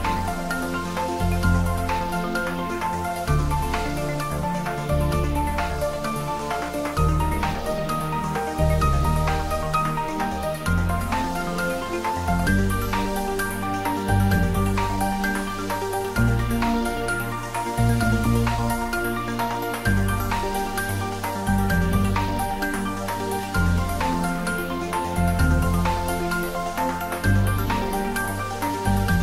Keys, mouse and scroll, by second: 0.1 click, 0.8-1.8 middle click, 1.8 shift+click, 2.2-2.8 shift+middle click, 3.1-4.3 middle click, 4.4-4.9 scroll up 1, 5.5 middle click, 5.9-7.1 scroll up 1, 11.3 click, 12.1 alt+e, 13.4 click, 23.2 click, 23.6-24.6 scroll up 1, 25.2 click, 25.8 scroll up 1, 26.8-27.4 middle drag.